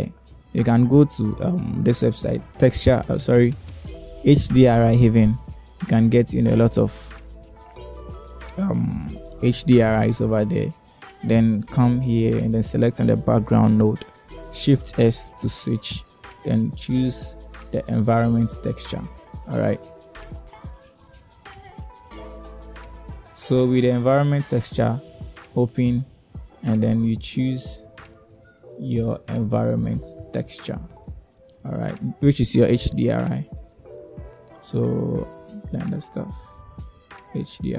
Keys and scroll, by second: 16.6 shift+s.